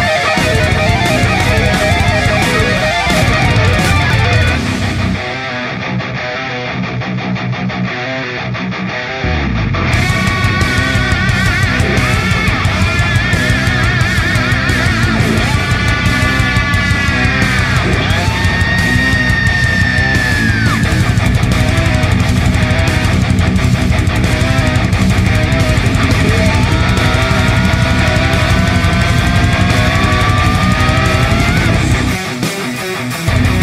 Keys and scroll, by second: 0.1-0.4 typing, 5.5-7.2 typing, 10.1-30.1 space, 29.3 ctrl+space, 30.2 ctrl+space, 30.4 ctrl+space.